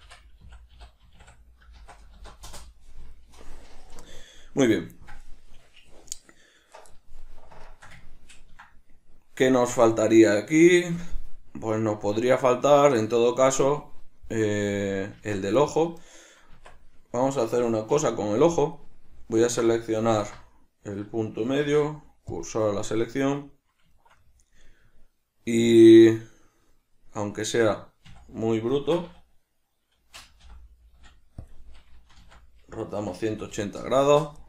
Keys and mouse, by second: 7.8-15.7 shift+middle drag, 15.3 Tab, 15.7 right click, 16.6 Tab, 18.0 \, 18.6 middle click, 19.5 right click, 20.3 q, 23.3 middle click, 28.9 shift+middle click.